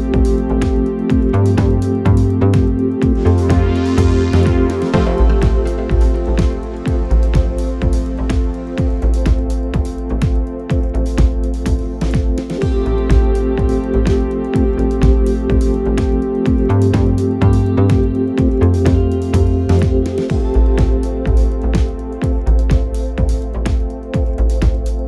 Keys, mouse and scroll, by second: 2.5 KP_1, 2.9-3.4 scroll up 4, 3.9-5.5 scroll down 4, 5.5 click, 6.7 click, 11.9 click, 13.1-13.9 drag, 16.1-17.3 drag, 21.5 click, 23.3 drag, 23.9 click.